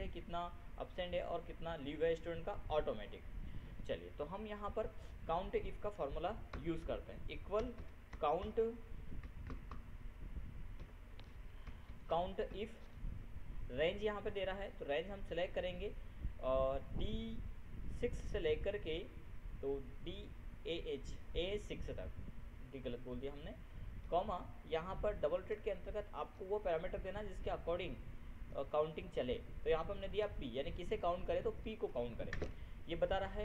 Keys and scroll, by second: 8.1 ctrl+c, 8.3 ctrl+o, 8.6 ctrl+n, 8.9 ctrl+u, 10.1 ctrl+BackSpace, 11.3 ctrl+u, 12.2 ctrl+Down, 13.0 ctrl+Tab, 27.8 ctrl+shift+p, 31.9 ctrl+shift+0, 32.9 ctrl+Return.